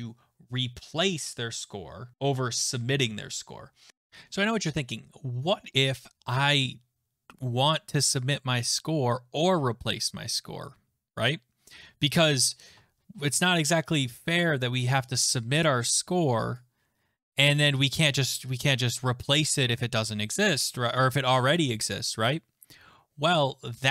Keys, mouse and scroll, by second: 0.1 alt+click.